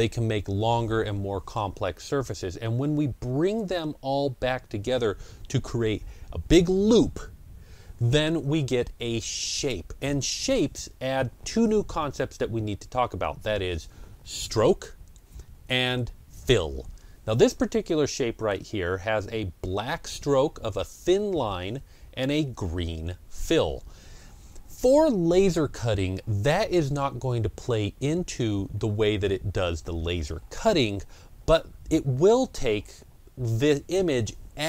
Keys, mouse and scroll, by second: 10.9 click, 10.9 scroll down 1, 18.0 click, 18.0 scroll down 1, 18.2 ctrl+scroll up 1, 21.7 ctrl+scroll up 1, 21.9 ctrl+scroll down 1.